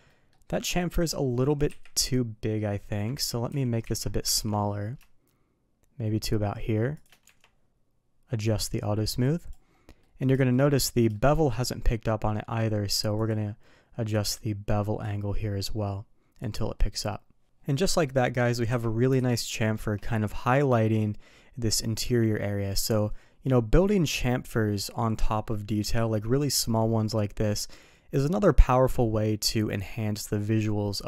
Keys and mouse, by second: 0.0 middle drag, 0.7-1.0 middle drag, 1.6 KP_3, 3.1 ctrl+z, 4.5 ctrl+b, 7.2 Tab, 8.5 click, 9.9 middle drag, 10.3 shift+middle drag, 11.1 shift+middle click, 13.2 click, 15.0-16.3 drag, 16.7 middle click, 17.8 middle drag, 18.6 KP_3, 19.1 alt+a, 19.4 shift+middle drag.